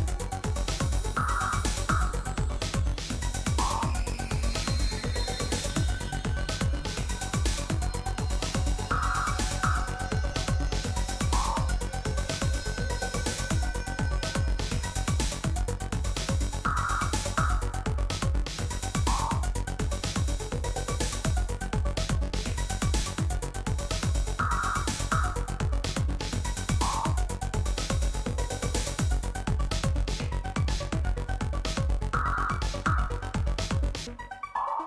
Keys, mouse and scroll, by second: 3.8 click, 4.9 click, 6.3-8.5 typing, 8.8 Return, 10.7 typing, 11.5-12.6 scroll up 1, 14.0-15.9 scroll down 1, 15.6-17.4 typing, 18.6-21.0 typing, 22.4-23.5 typing, 25.3 Return, 28.8 click, 31.0-32.2 drag, 32.9 click.